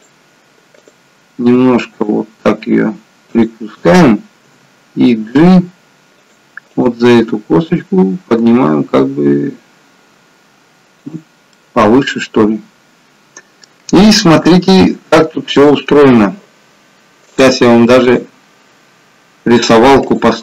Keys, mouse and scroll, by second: 0.8 click, 1.5 r, 4.6 g, 6.8 click, 7.4 g, 11.5 middle click, 14.2 scroll up 2, 14.5 shift+middle click, 15.9-17.2 scroll down 1.